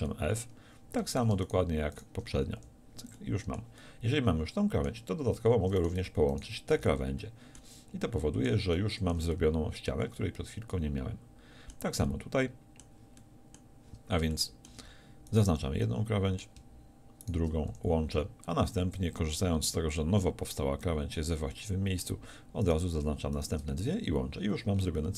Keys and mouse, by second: 2.6 f, 6.8 f, 7.1 a, 11.3 middle click, 12.1-20.9 middle drag, 17.7 f, 21.5-23.7 middle drag, 23.7 f, 24.4 a.